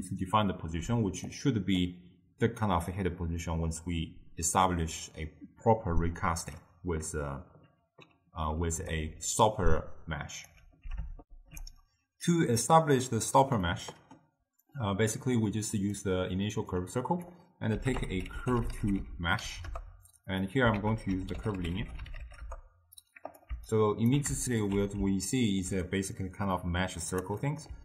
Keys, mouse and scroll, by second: 11.3 ctrl+alt+shift+q, 13.7-15.6 middle drag, 15.6 click, 16.8-20.0 drag, 20.8 ctrl+a, 23.8-24.5 alt+right drag, 24.5 alt+shift+click, 25.4-27.8 ctrl+middle drag.